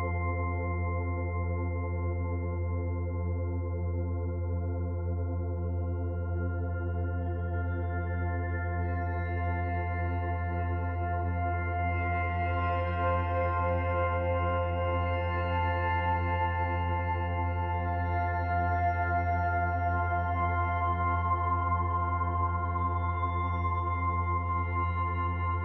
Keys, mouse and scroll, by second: 3.8 Tab, 4.7 middle click, 5.7-6.8 scroll down 1, 6.8-7.1 scroll down 1, 7.1 middle click, 10.3 shift+a, 13.3 click, 14.6 click, 18.8 KP_1, 22.5-23.4 scroll down 2, 22.9 middle click.